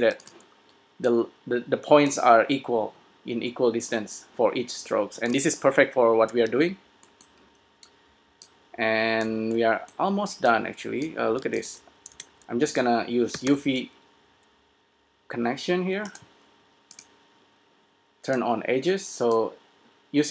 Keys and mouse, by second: 0.3 s, 1.4-3.3 drag, 5.6 s, 8.6 click, 11.7 s, 12.3 shift+a.